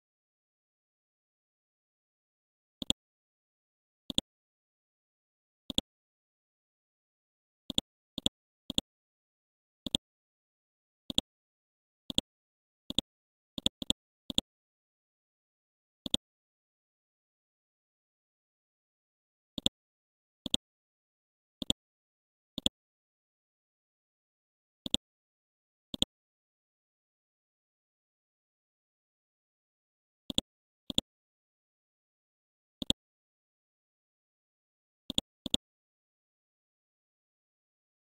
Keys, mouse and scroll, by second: 0.3 scroll up 1, 0.5-1.6 scroll down 1, 2.8 click, 3.4 click, 4.1 click, 4.7-5.7 scroll down 1, 5.7 click, 8.2 ctrl+click, 12.1 click, 16.7-17.1 scroll up 1, 17.1 right click, 18.9-19.5 scroll down 1, 19.5-22.5 drag, 23.1-24.8 scroll down 1, 24.8 click, 27.7 scroll up 1, 28.8 Home, 30.3 click, 31.7-32.8 scroll up 1, 32.8-33.9 drag, 35.1 click, 36.6-37.2 scroll up 2.